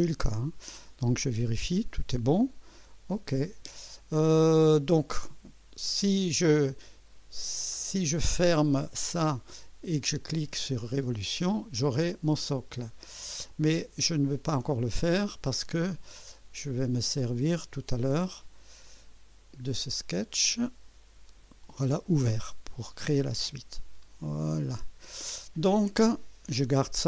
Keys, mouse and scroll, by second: 0.3 right click, 8.7 click, 11.1 click, 13.5 click, 15.2 click, 15.9 scroll up 2, 16.4-17.0 right drag, 18.1 right click, 18.9 click, 20.0 click, 21.4 Delete, 24.2 click.